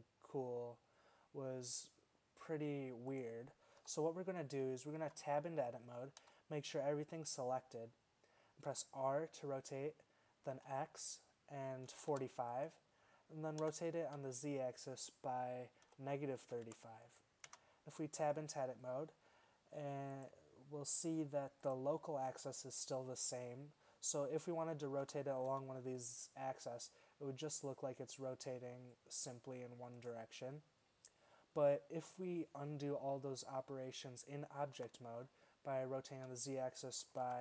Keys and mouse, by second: 3.9 z, 5.1 Tab, 6.0 a, 6.2 a, 8.7 r, 12.7-16.9 drag, 13.7 r, 17.5 Tab, 22.4 z, 25.1 r, 34.8 r.